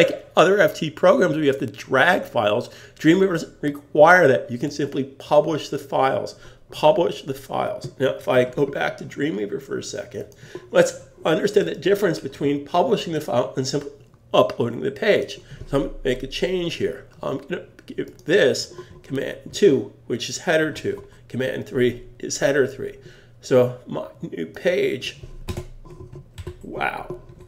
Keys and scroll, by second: 19.5 super+2, 20.9 super+s, 25.9-27.3 typing.